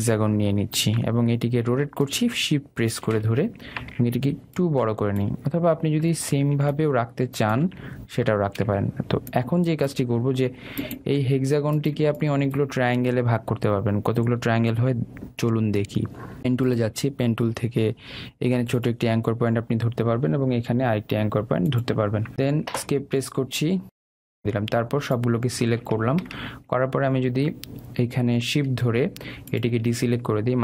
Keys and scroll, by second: 23.9 Escape.